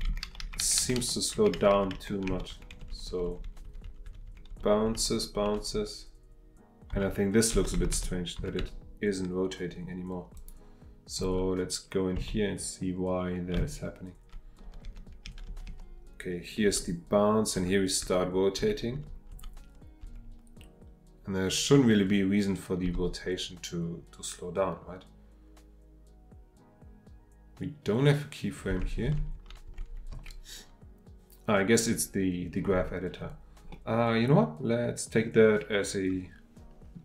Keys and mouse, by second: 0.1 Left, 0.2 Left, 0.4 Left, 0.8 Left, 1.0 Left, 1.3 Left, 1.5 Left, 1.7 Left, 1.9 Left, 2.3 Left, 2.5 Right, 2.7 Right, 2.9 Right, 3.1 Right, 3.2 Right, 3.4 Right, 3.6 Right, 3.8 Right, 4.0 Right, 4.3 Right, 4.5 Right, 5.1 Right, 5.3 Right, 5.6 Right, 5.7 Right, 6.9 Right, 7.7 Left, 7.9 Left, 8.4 Right, 8.6 Right, 10.3 click, 12.1 Right, 13.5 Left, 14.1 Left, 14.1 Left, 14.2 Left, 14.6 Left, 14.8 Left, 15.2 Left, 15.5 Left, 15.7 Left, 16.7 Right, 17.5 Right, 18.0 Right, 18.6 Right, 18.9 Right, 19.3 Right, 20.0 Right, 22.8 Right, 28.7 Right, 29.1 Right, 29.3 Right, 29.7 Right, 29.9 Right, 30.1 Right, 33.7-36.9 middle drag, 36.9 click.